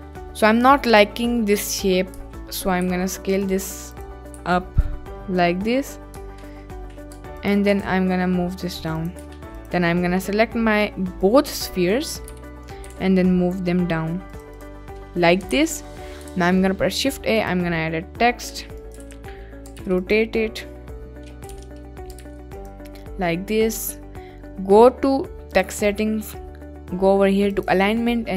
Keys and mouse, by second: 0.2 middle click, 1.5 middle click, 1.8 Tab, 2.9 s, 3.3 right click, 3.9 click, 4.4 s, 7.4 ctrl+click, 7.7 g, 7.8 z, 9.1 Tab, 9.6-9.9 drag, 11.4 drag, 12.4 KP_Decimal, 12.8 g, 12.9 z, 14.3 click, 15.0 middle click, 15.6 ctrl+s, 15.9 middle click, 16.3 shift+a, 18.5-19.8 typing, 20.0 click, 21.4 r, 22.2 9, 22.2 0, 22.5 click, 25.5 click, 27.5-28.3 drag.